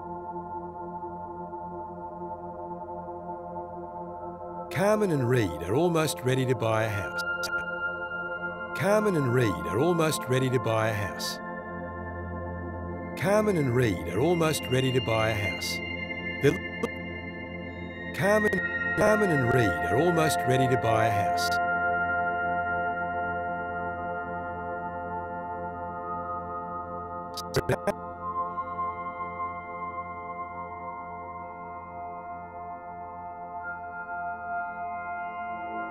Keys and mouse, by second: 0.0-1.1 drag, 1.5 BackSpace, 1.7 1, 1.9 Return, 3.4-4.1 drag, 3.8 space, 7.0 space, 7.4 drag, 7.9 space, 11.5 space, 11.9-12.5 drag, 12.3 space, 16.4 space, 16.7-17.6 drag, 17.3 space, 18.3 space, 18.9 space, 21.5 space, 23.0 click, 23.3 click, 24.0 drag, 24.4 click, 25.8 click, 27.3-30.2 drag, 31.6 click, 32.9 i, 34.9 click, 35.4 click, 35.7-35.9 drag.